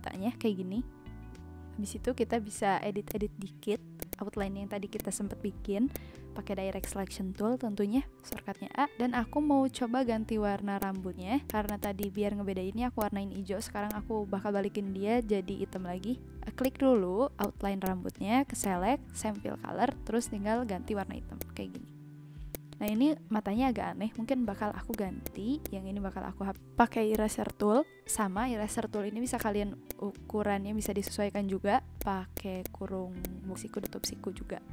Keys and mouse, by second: 1.6 click, 3.1 click, 3.2 a, 4.0 click, 4.9 click, 5.4 ctrl+z, 6.8 click, 8.3 click, 10.8 click, 11.4 click, 12.9 click, 13.8 click, 22.5 click, 24.9 click, 27.1 click, 29.3 click, 29.8 click, 30.8 click, 31.9 click, 33.2 click, 33.8 click.